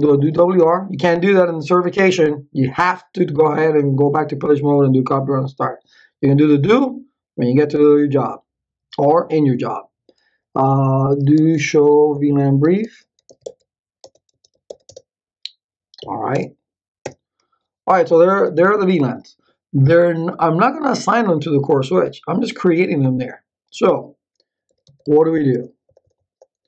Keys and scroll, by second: 0.0-0.6 typing, 10.8-14.8 typing, 14.9 Return, 16.0 Up, 16.3 BackSpace, 17.0 Return, 24.4-25.6 typing.